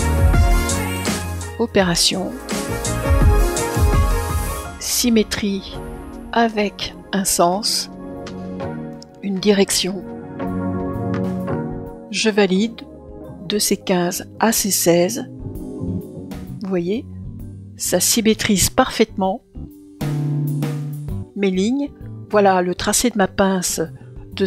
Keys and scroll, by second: 9.4 Return.